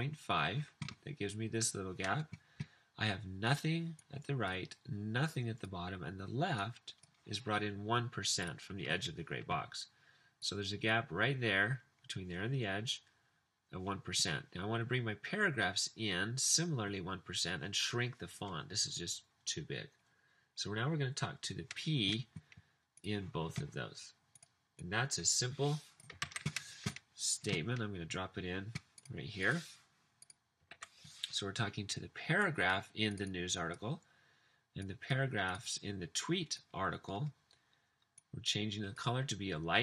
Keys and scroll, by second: 26.3 super+c, 30.8 super+v.